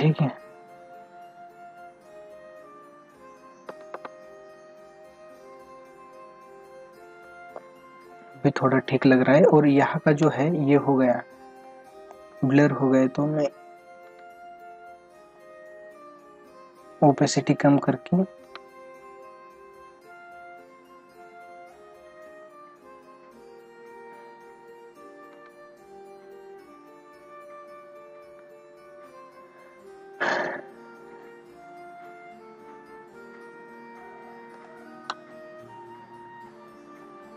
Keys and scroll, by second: 0.7 ctrl+=, 2.7 ctrl+=, 3.7 ctrl+alt+z, 7.4 ctrl+=, 9.5 space, 10.6 ctrl+=, 14.1 ctrl+alt+z, 18.4 ctrl+alt+z, 20.4 ], 25.4 ctrl+alt+z, 27.8 ctrl+-, 29.9 ctrl+-, 31.6 ctrl+-, 32.3 ], 34.5 space.